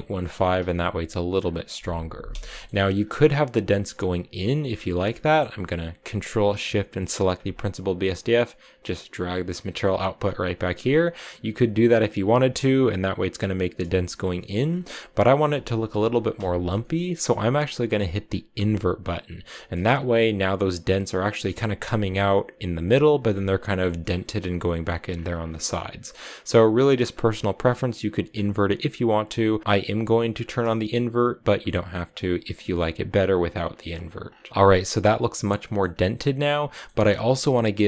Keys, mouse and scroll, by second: 1.2-2.2 scroll down 2, 2.3 shift+middle click, 2.8-4.4 scroll up 3, 4.5 scroll down 7, 5.0-6.9 middle drag, 6.9 ctrl+shift+click, 7.3-8.7 drag, 10.4 click, 11.1-12.1 scroll down 4, 12.1-14.4 shift+middle drag, 14.4 scroll up 4, 15.0 click, 16.6-18.4 scroll up 4, 16.6 middle click, 18.4 click, 19.3 shift+middle click, 19.5-20.3 shift+scroll up 4, 23.9-24.3 scroll up 2, 24.9-25.5 scroll down 9, 25.5-25.9 scroll up 2, 26.9 click, 28.1 click, 29.6 click, 30.1 click, 31.4 click, 33.1 click, 33.7 click, 34.1-34.5 scroll down 9, 34.5-35.7 shift+middle drag, 35.7-36.5 scroll up 1, 36.5-37.8 middle drag.